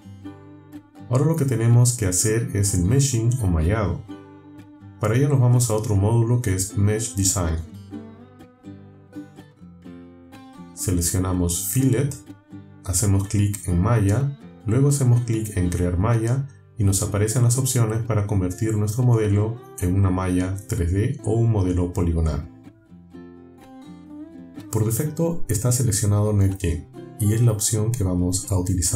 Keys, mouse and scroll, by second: 2.5 click, 7.8 click, 9.3 click, 11.4 click, 13.6 click, 15.2 click.